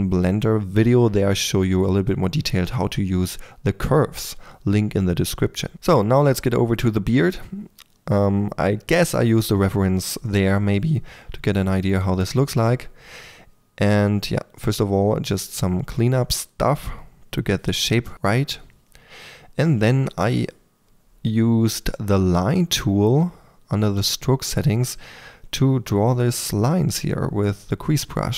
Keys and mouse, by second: 0.0-1.7 typing, 2.6 alt+Tab, 2.9 click, 3.9-5.8 drag, 6.0 click, 6.7 f, 7.1 Tab, 7.7 ctrl+1, 7.8 f, 8.0 click, 8.9 f, 8.9 3, 9.3 f, 9.5 click, 10.4-11.5 drag, 10.4 f, 11.5 f, 12.3 click, 12.8 click, 13.4-13.8 drag, 13.8 f, 13.9 f, 14.2 click, 14.5 f, 14.9 click, 15.6 ctrl+f, 16.2 ctrl+f, 16.3-19.8 typing, 17.0 click, 17.3-18.0 drag, 18.1-18.8 drag, 19.0 click, 19.5 click, 19.9-20.4 drag, 21.1 f, 21.7 click, 22.4 click, 22.7 f, 23.2-23.7 drag, 23.7 1, 23.8 f, 24.4 4, 24.7 f, 26.2 click, 26.5-26.9 middle drag, 26.9 click, 27.1-27.5 middle drag, 27.5 click.